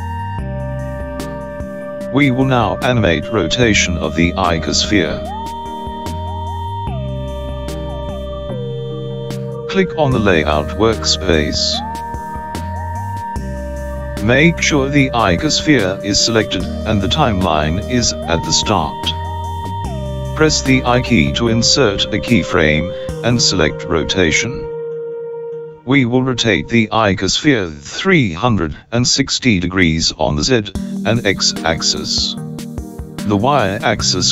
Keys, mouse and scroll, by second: 13.1 click, 22.4 i.